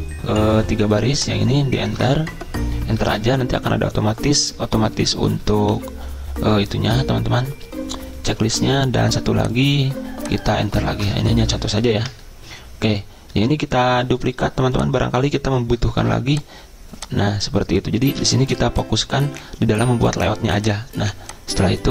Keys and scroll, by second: 3.1 Return, 4.9 BackSpace, 5.4 ctrl+z, 5.7 Delete, 7.0 l, 12.1 Return, 18.2 BackSpace.